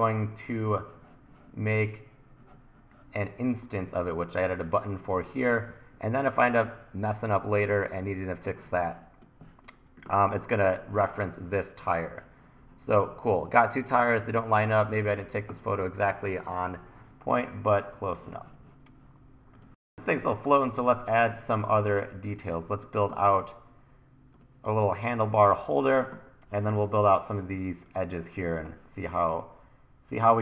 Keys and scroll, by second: 5.7 e, 8.7 1, 14.3 1, 19.7 1, 25.2 1, 27.6 1.